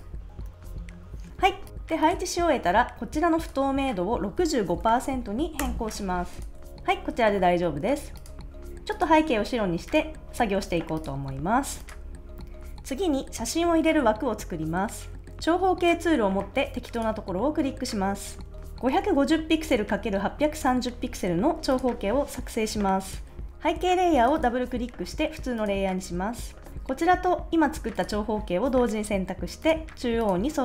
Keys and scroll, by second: 0.8 Down, 0.9 Left, 4.4-5.3 typing, 5.6 Return, 6.6 super+s, 11.4 super+s.